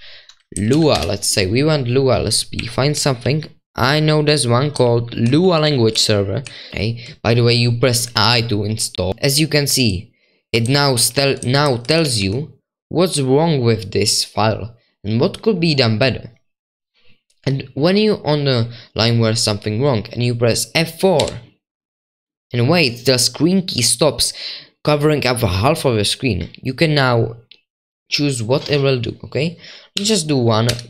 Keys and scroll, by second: 0.0-1.0 typing, 2.6-3.7 typing, 4.7-7.8 typing, 8.8-12.2 typing.